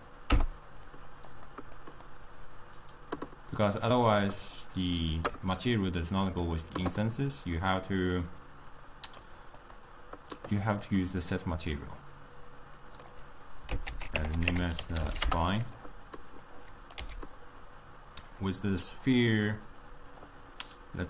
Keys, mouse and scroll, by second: 1.9-6.5 middle drag, 6.5 click, 7.7-8.1 drag, 9.7 click, 11.0-12.9 drag, 13.0-16.1 drag, 16.5-17.1 drag, 17.1 x, 18.3 click.